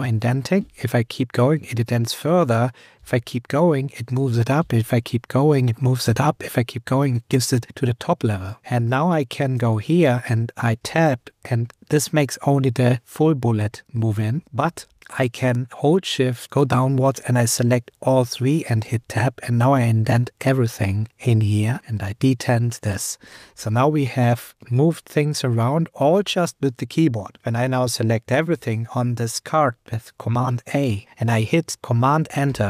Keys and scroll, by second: 0.6 shift+super+Up, 2.9 shift+super+Up, 4.6 shift+super+Up, 8.6 Down, 9.6 super+Left, 13.6 shift+Tab, 14.4 Left, 16.4 shift+Down, 20.4 Down, 21.3 Up, 21.8 shift+Tab, 23.2 Up, 24.8 super+Return, 28.5 super+a, 32.4 super+Return.